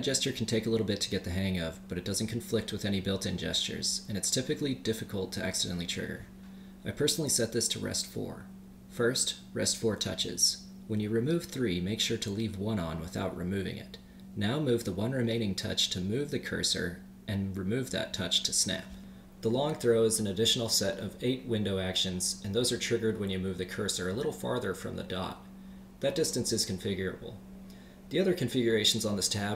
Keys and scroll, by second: 23.0 super+Up.